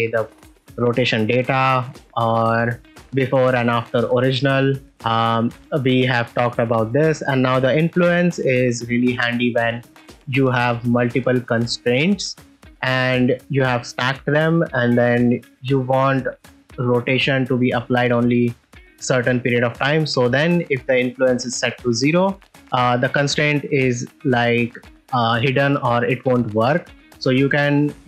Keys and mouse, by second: 2.0-4.0 drag, 4.2 click, 7.4 click, 19.9-21.1 drag, 21.8 click, 22.4 r.